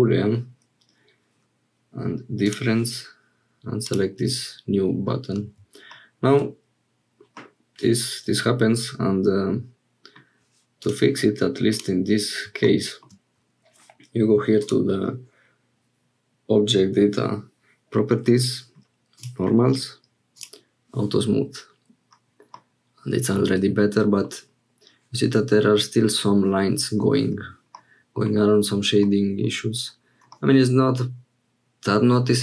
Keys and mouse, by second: 2.4 click, 5.9 shift+click, 7.4-10.2 middle drag, 10.8 click, 14.6 click, 22.5-24.3 middle drag, 27.7 middle click, 29.0 middle click, 30.3-32.4 middle drag.